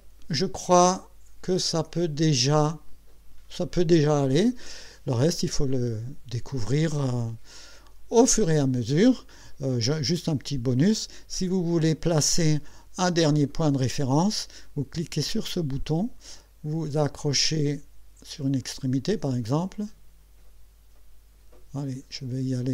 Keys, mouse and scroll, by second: 15.8 click, 18.6 click.